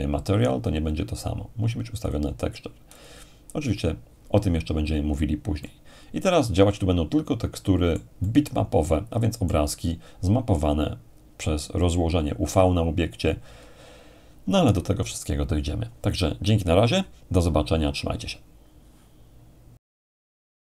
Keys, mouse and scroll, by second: 2.0-4.0 drag, 5.6-10.4 middle drag.